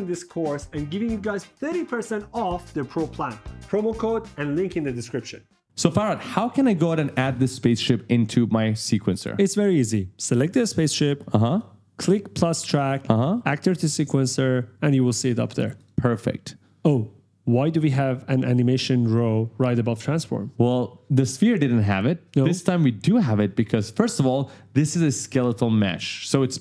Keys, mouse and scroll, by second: 11.2 click, 12.6 click, 15.5 click.